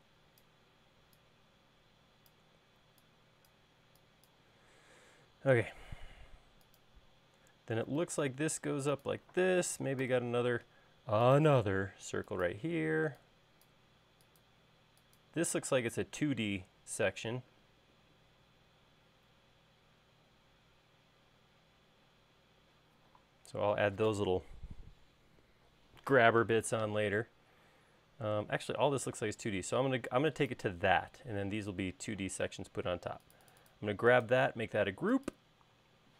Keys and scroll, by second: 5.7 l, 10.2 c, 13.0 e, 29.8 e, 32.3 space.